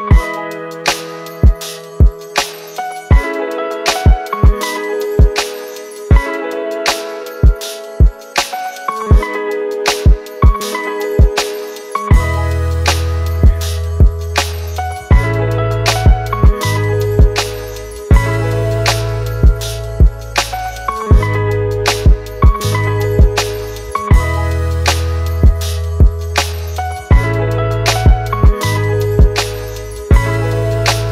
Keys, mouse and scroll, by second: 1.0-1.4 alt+scroll up 3, 4.8 ctrl+t, 13.0 Return, 14.0 alt+scroll down 1, 14.7-15.5 alt+scroll up 1, 15.8-16.5 alt+scroll up 1, 18.1 double click, 28.7-29.0 typing.